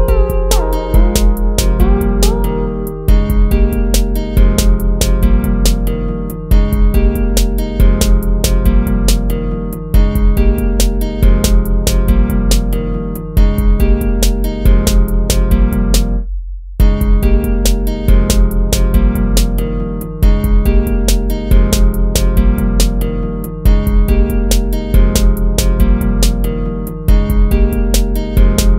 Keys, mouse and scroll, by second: 1.5 ctrl+z, 2.6 ctrl++, 2.8 ctrl+-, 3.2 ctrl++, 10.2 ctrl+-, 17.7 right click, 19.3 ctrl++, 19.7 ctrl++, 20.2 ctrl+-, 20.4 scroll up 1, 20.6 ctrl++, 21.4 ctrl++, 22.1 ctrl+-, 22.2 ctrl++, 23.7 ctrl+-, 25.4 ctrl+-, 25.6 ctrl++, 27.5 ctrl++, 28.4 ctrl++.